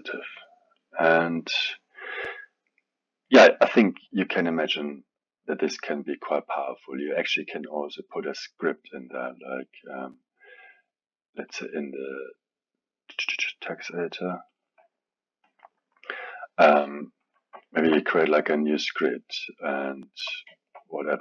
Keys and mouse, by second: 3.9 click, 11.5-17.6 drag, 17.6 alt+middle click, 18.3 click.